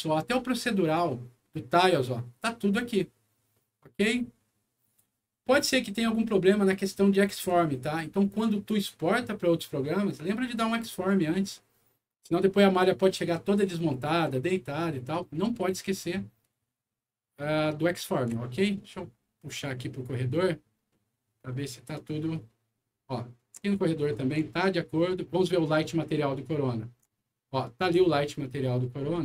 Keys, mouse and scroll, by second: 1.1-3.0 middle drag, 3.5 middle click, 6.7 middle click, 11.0-12.1 middle drag, 14.9 middle click, 16.8 middle click, 17.8 middle click, 18.4 shift+middle click, 19.0 shift+middle click, 19.7 shift+middle click, 20.9 shift+middle click, 21.8 shift+middle click, 22.8 shift+middle click, 23.7 shift+middle click, 24.5 shift+middle click, 25.3 shift+middle click, 26.1 shift+middle click, 27.8 shift+scroll up 1, 28.3-29.2 shift+scroll up 5.